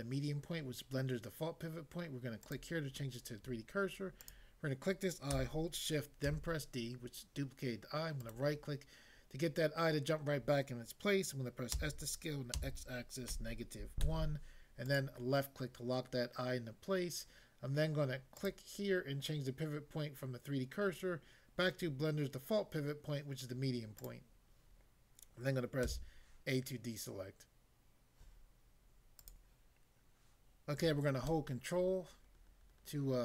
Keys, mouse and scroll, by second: 2.5 click, 4.2 click, 6.2 d, 8.2 right click, 11.7 s, 12.5 x, 13.3 -, 14.0 1, 14.8 click, 18.3 click, 24.0 click, 25.9 a, 29.1 click, 29.4 click, 31.2 ctrl+middle click.